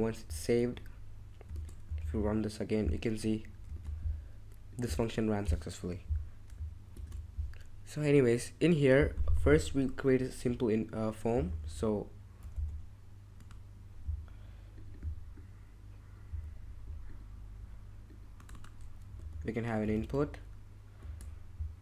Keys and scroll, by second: 1.5 ctrl+Tab, 2.0 super+r, 3.7 ctrl+Tab, 6.9 super+Tab, 11.2-13.9 typing, 16.2-19.4 typing, 19.8 Tab, 20.0 Tab, 21.0 Tab.